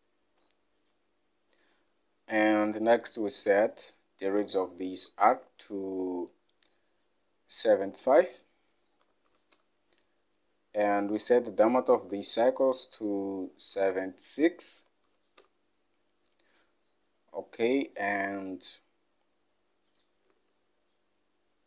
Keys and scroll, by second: 5.4 alt+Tab, 9.1 typing, 9.6 Return, 12.2 alt+Tab, 14.9 typing, 15.5 Return, 20.4 alt+Tab.